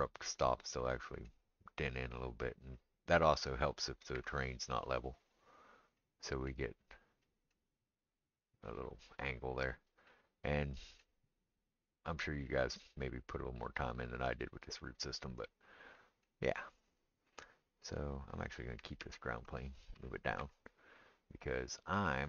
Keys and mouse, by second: 4.1 r, 10.2 click, 10.4-22.2 middle drag, 19.0 ctrl+z, 19.9 g.